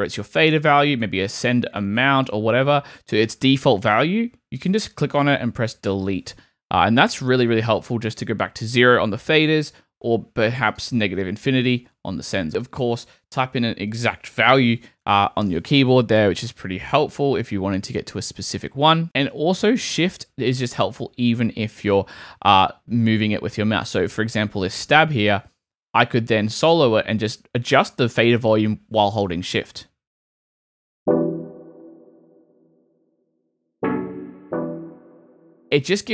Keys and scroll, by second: 5.8 BackSpace, 9.7 super+z, 11.5 BackSpace, 12.3 super+BackSpace, 14.3 -, 15.0 5, 15.4 Return, 29.7 space, 35.6 shift+space.